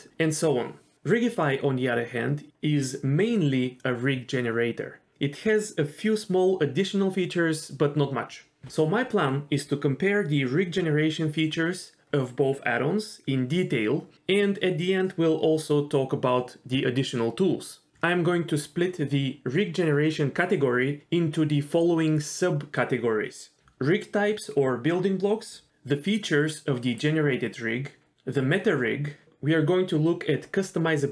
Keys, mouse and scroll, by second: 0.4 scroll up 1, 0.4 s, 0.8 s, 1.7 s, 2.8 click, 3.0 g, 16.5 click, 16.6 g, 18.5 g, 19.5 scroll down 2, 19.6 shift+middle click, 19.7-20.2 scroll up 1, 20.2 click, 20.3 g, 21.0 click, 21.1 g, 22.3-22.8 scroll down 1.